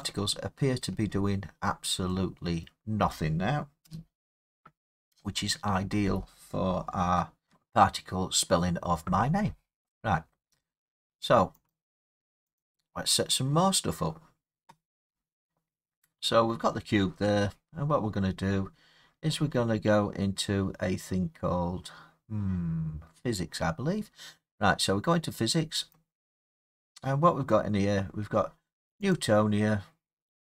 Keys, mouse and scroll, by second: 0.8 middle click, 1.0 middle click, 1.0 middle click, 1.6 middle click, 1.7 middle click, 2.6 middle click, 3.8 0, 11.7 click, 12.6 click, 17.5-19.1 scroll, 25.9 click, 27.8 middle click, 27.9 middle click, 27.9 middle click, 29.1 click.